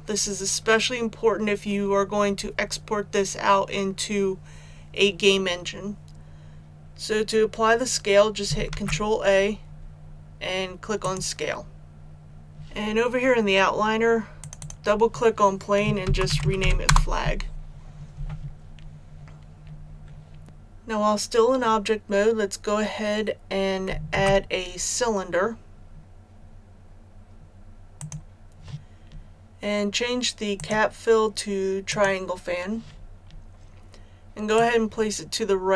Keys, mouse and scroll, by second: 6.5 click, 8.6 ctrl+a, 10.9-12.0 drag, 16.0-16.5 typing, 16.8 Return, 24.0 shift+a, 27.9-35.7 drag.